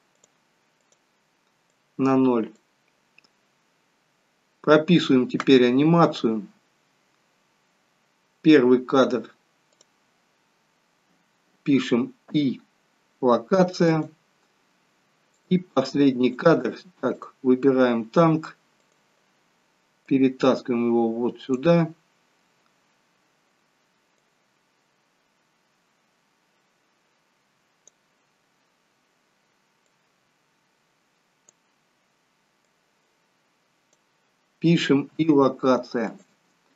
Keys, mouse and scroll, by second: 0.2 click, 0.8 click, 1.8 click, 9.8 click, 12.3 i, 15.6 click, 17.5 click, 18.9 click, 20.2 click, 24.3 click, 29.9 click, 32.8 click, 35.1 i.